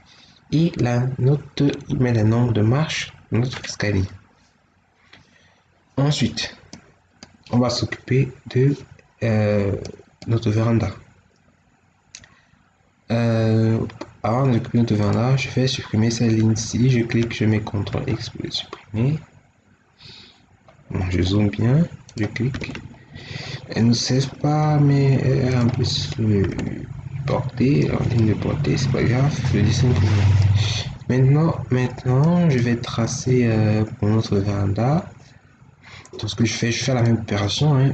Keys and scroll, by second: 1.9 Escape, 17.8 ctrl+x, 22.5 ctrl+x, 26.4 ctrl+x.